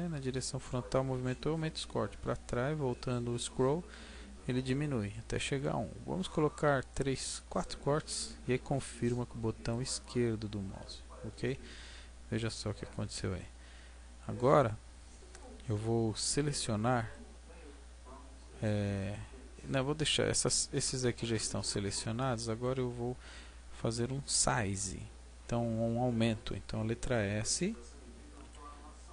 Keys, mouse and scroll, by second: 9.8 click, 11.7 middle click, 17.8-18.4 scroll up 3, 18.4-18.9 scroll down 3, 18.9 middle click, 28.4 s.